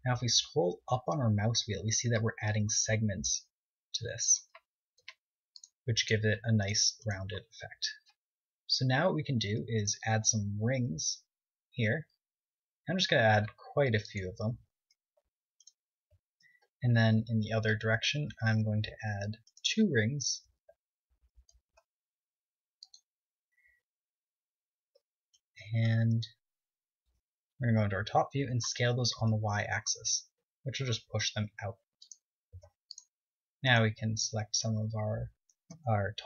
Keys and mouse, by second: 5.7-6.9 drag, 6.3 ctrl+Tab, 7.6-10.1 right drag, 10.1 middle click, 11.3 ctrl+r, 17.2-18.7 drag, 17.7 ctrl+r, 18.7 middle click, 20.8 click, 20.9 right click, 22.8 ctrl+r, 27.4 right click, 28.3 KP_7, 29.0 right click, 29.3 click, 29.6 s, 33.2 click, 33.6 ctrl+Tab, 34.7-36.1 drag, 34.7 right click.